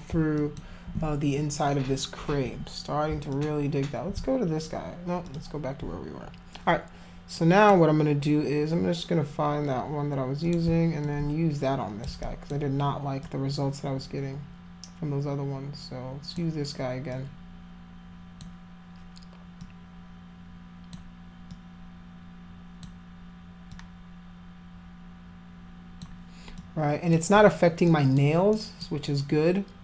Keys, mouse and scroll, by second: 0.3 alt+click, 3.3 alt+click, 5.3 alt+click, 7.4 click, 10.4 click, 11.0-12.0 alt+drag, 12.2 alt+click, 13.2-16.4 alt+drag, 17.1-18.4 alt+drag, 19.6-20.9 alt+drag, 21.5-22.8 alt+drag, 23.7-26.0 alt+drag, 26.5 alt+click, 27.9 alt+middle click, 28.5 alt+middle click.